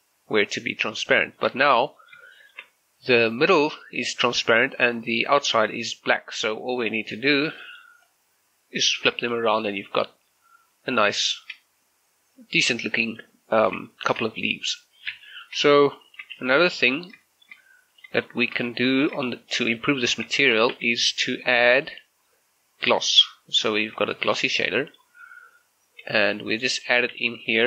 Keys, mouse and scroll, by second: 1.2 shift+middle click, 1.8-2.2 scroll up 1, 2.4 shift+middle click, 6.9-9.0 drag, 9.0 scroll down 1, 9.4 shift+middle click, 9.8 middle click, 11.0 scroll up 1, 11.3 shift+middle click, 12.6 scroll down 1, 12.9 middle click, 14.5 middle click, 15.3 shift+middle click, 16.0 shift+click, 16.4 g, 16.8 click, 17.1 scroll down 1, 17.3 shift+middle click, 18.0 click, 18.3 shift+middle click, 19.0 click, 19.4 shift+middle click, 19.8 g, 20.2 click, 20.4 shift+middle click, 20.8 shift+a, 23.2 click, 24.2 shift+middle click, 24.8 shift+middle click, 25.3 g, 26.1 g, 26.8 click, 27.2 shift+a.